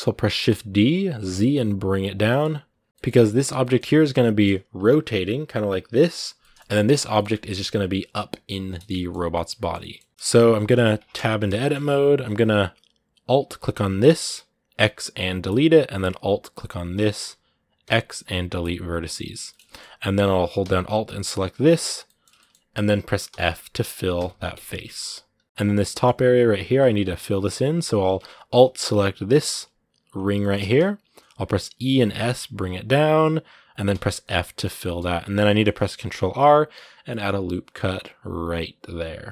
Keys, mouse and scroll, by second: 2.1 middle click, 2.2-2.6 scroll up 2, 2.6 g, 2.9-4.2 middle drag, 4.2-5.6 scroll up 1, 6.2 middle click, 6.6 right click, 6.8 scroll down 2, 6.9 shift+middle click, 7.4 g, 8.5-9.8 middle drag, 9.8 scroll down 1, 9.9 right click, 10.1 shift+middle click, 10.9 Tab, 11.4 shift+middle click, 11.5 shift+scroll up 2, 13.8-15.3 alt+right drag, 15.3 x, 16.8-18.4 alt+right drag, 18.4 x, 19.3-21.3 shift+middle drag, 21.3 alt+right click, 21.8-23.1 middle drag, 23.1 s, 24.5 scroll down 1, 24.7 middle click, 25.4 scroll up 2, 25.7-29.2 shift+middle drag, 29.2-30.2 alt+right drag, 30.2-31.4 shift+middle drag, 31.4 e, 34.0 middle click, 34.4 scroll down 2, 34.6 middle click, 35.1 scroll up 1, 35.2 middle click, 35.9 ctrl+r.